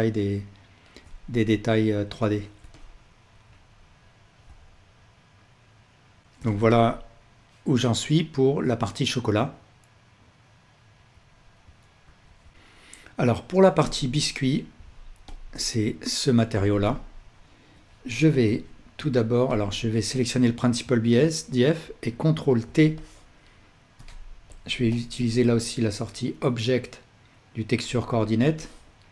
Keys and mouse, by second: 2.4 middle click, 12.2 ctrl+s, 16.9-19.6 ctrl+alt+drag, 18.3 shift+a, 21.9 ctrl+t, 23.0-24.6 drag, 24.0 g, 26.7-27.0 drag.